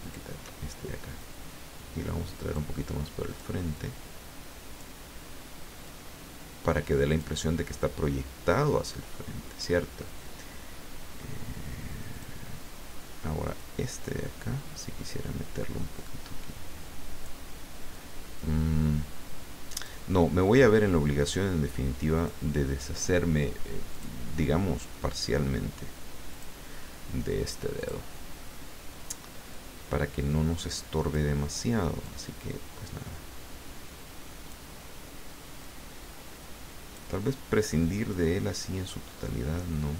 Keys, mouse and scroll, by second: 0.0 shift+click, 1.2-2.7 drag, 3.3 click, 3.7-5.0 drag, 5.8-7.6 drag, 8.0-9.9 drag, 12.1 click, 13.4 click, 14.0-17.4 drag, 17.9-20.2 drag, 22.1 click, 23.9 click, 26.3 click, 27.8 click, 29.5-31.3 drag, 32.0-34.7 drag, 35.6-37.2 drag, 38.1-39.9 drag.